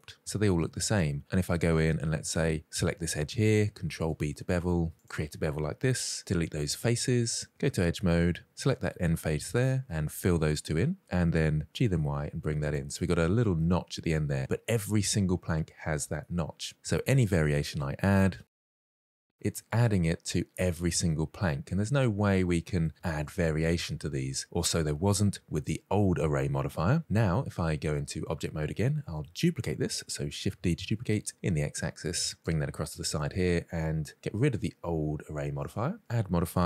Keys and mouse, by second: 0.2 shift+middle drag, 1.1 middle click, 1.8 2, 2.0 click, 3.9 ctrl+b, 5.0 click, 6.2 Delete, 7.9 2, 8.4 click, 9.8 f, 9.9 f, 10.9 click, 11.7 g, 12.5 click, 12.5 y, 13.4 middle click, 14.2 middle drag, 15.6-16.1 middle drag, 16.5 middle click, 17.7 1, 17.8 drag, 18.2 ctrl+shift+b, 18.5 middle click, 19.2 ctrl+shift+b, 19.2 2, 19.3 drag, 20.1-20.4 middle drag, 20.8 middle drag, 21.6-22.9 middle drag, 23.1 shift+middle drag, 27.8 Tab, 28.6-29.1 middle drag, 30.6 shift+d, 31.2 x, 32.8-33.1 shift+middle drag, 35.3 click, 36.0-36.6 drag.